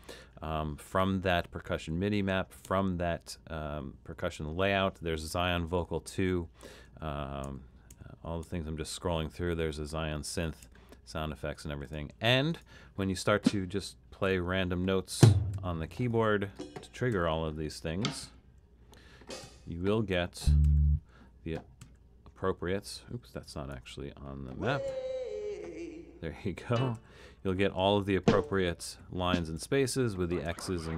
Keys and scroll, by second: 0.3 Down, 1.7 Down, 2.7 Down, 6.2 Down, 6.9 Down, 7.5 Down, 8.0 Down, 8.5 Down, 10.7 Down, 14.4 5, 15.5 typing, 17.3 5, 18.3 typing, 19.5 typing, 20.7 typing, 21.8 typing, 23.4 Left, 23.7 BackSpace, 24.9 5, 27.0 5, 28.5 typing, 29.6-30.9 typing.